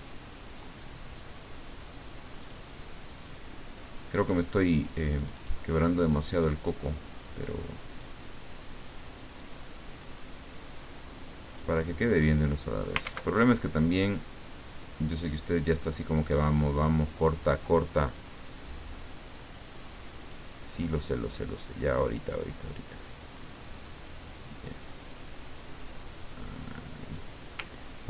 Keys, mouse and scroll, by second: 2.4 click, 5.1 click, 6.8-8.2 drag, 9.4 click, 10.5-11.8 drag, 12.0 click, 13.0 ctrl+z, 13.8-16.4 drag, 18.3 click, 20.2 click, 22.6-24.2 drag, 25.4-27.3 drag, 27.8 ctrl+scroll down 2.